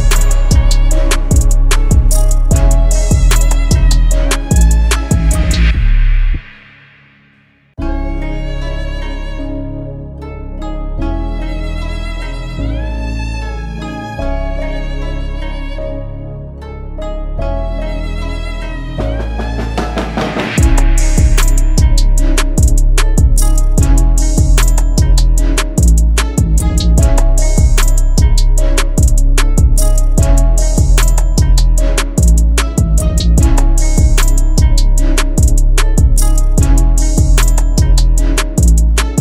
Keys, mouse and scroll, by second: 1.0-2.6 typing, 3.0 double click, 7.0 alt+scroll up 1, 7.4 alt+scroll down 1, 7.8 alt+scroll up 1, 10.0-10.3 alt+scroll down 1, 10.8 double click, 15.0 double click, 15.8 right click, 23.5 right click, 25.4 double click, 35.1 right click, 36.3 double click.